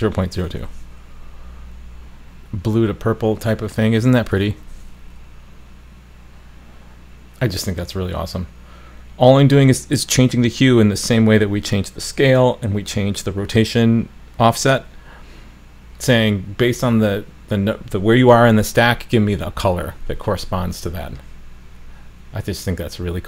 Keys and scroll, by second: 0.5 super+s, 4.5 super+s.